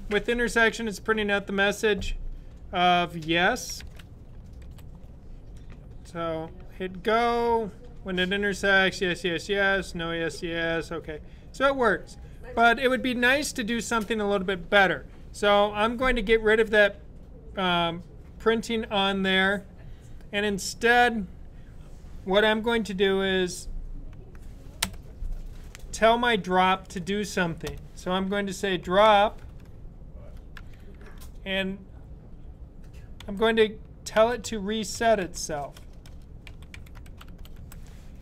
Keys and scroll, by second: 4.4 super+b, 28.4-30.4 typing, 32.8-37.7 typing.